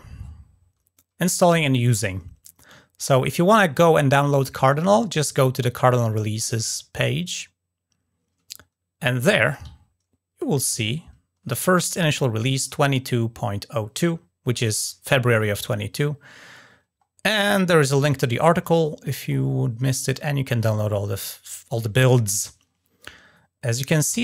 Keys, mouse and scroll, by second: 7.0 click, 7.2 click, 9.2 click, 9.6-11.2 ctrl+scroll up 4, 11.4-11.9 scroll down 1, 11.9-12.3 ctrl+scroll up 1, 16.4 scroll down 2, 19.6-20.1 scroll down 2.